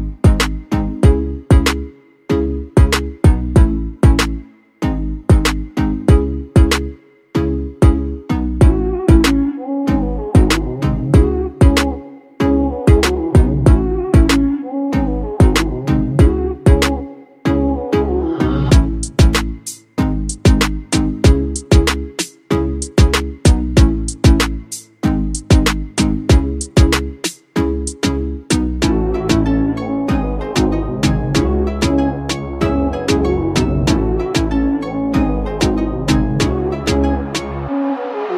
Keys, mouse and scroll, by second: 0.4-1.2 typing, 3.0-3.7 typing, 7.2 double click, 9.3 typing, 11.3 double click, 20.0 ctrl+z.